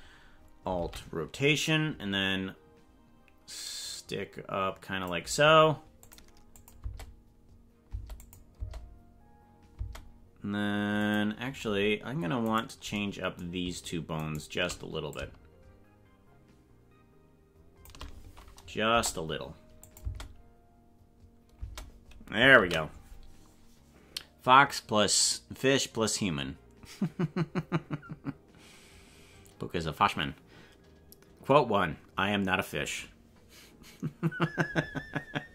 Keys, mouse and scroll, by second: 0.8 alt+r, 1.7-5.0 drag, 6.0 click, 6.8 space, 7.9 space, 8.2 click, 8.6 space, 9.8 space, 11.0 click, 12.5 right click, 14.3 shift+right click, 15.1-17.8 shift+drag, 18.9 KP_0, 19.9 click, 20.0 space, 21.6 space, 22.7 ctrl+s.